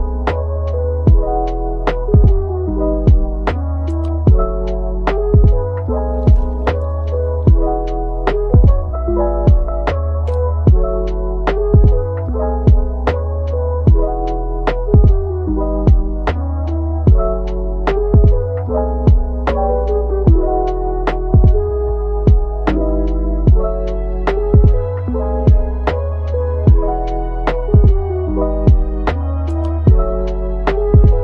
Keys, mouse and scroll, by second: 0.3 typing, 3.2 middle click, 5.6 shift+a, 10.0-10.3 scroll down 1, 11.0 s, 13.6-14.9 typing, 15.6-16.5 scroll up 1, 16.5 middle click, 18.5 typing, 19.8 middle click, 20.8-21.7 typing, 24.1 ctrl+l, 25.8 typing, 28.2-28.6 typing, 30.9-31.2 typing.